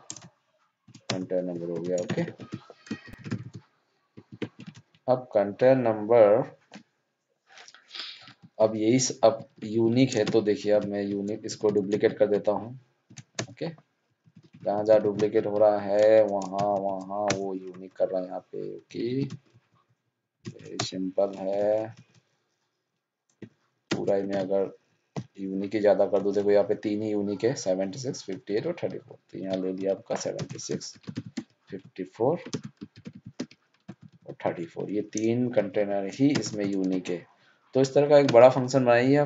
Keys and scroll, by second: 1.5 ctrl+Up, 2.0 ctrl+shift+Down, 2.3 ctrl+c, 9.7 ctrl+c, 14.9 ctrl+Down, 15.0 ctrl+c, 18.9 ctrl+Up, 19.0 ctrl+c, 23.8 ctrl+shift+Down, 24.2 ctrl+d, 31.3 alt+o, 32.5 ctrl+space, 32.9 alt+o, 36.9 ctrl+shift+Down.